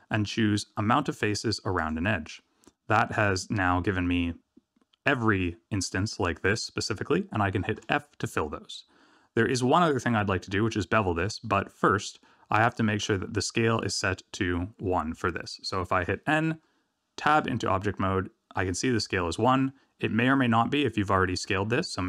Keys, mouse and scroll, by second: 2.6 middle click, 7.7 f, 9.8-10.8 scroll down 2, 12.1-12.9 scroll up 1, 15.1 n, 17.3 Tab.